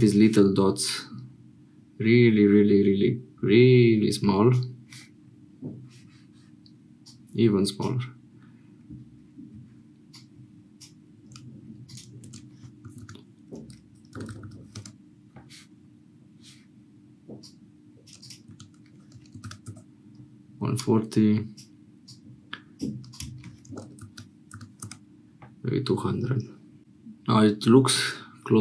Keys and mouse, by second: 4.0-9.3 drag, 19.9-28.6 drag.